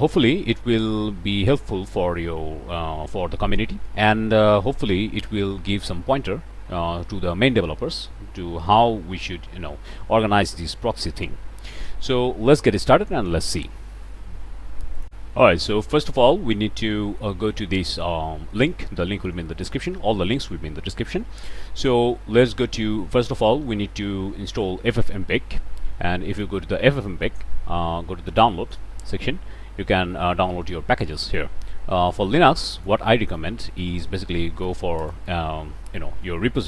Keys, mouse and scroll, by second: 0.5 click, 1.9 click, 3.0 click, 3.5 scroll down 2, 4.0-5.0 drag, 5.1 click, 5.4 click, 6.1 click, 6.5 click, 7.5 click, 8.6 click, 9.2 click, 9.6 click, 10.2 click, 10.4 click, 10.6 click, 10.8 click, 11.3-11.8 drag, 12.5-13.1 drag, 13.2 click, 13.4 click, 14.6 click, 15.0 click, 16.4 scroll down 1, 16.6-18.0 drag, 18.7 click, 19.6 click, 24.2-24.6 middle drag, 26.3 click, 27.5 scroll down 1, 28.2 click, 29.5 scroll down 2, 30.3 scroll up 2, 32.1 click, 34.5 a, 34.6 p, 34.8 t, 34.9 space.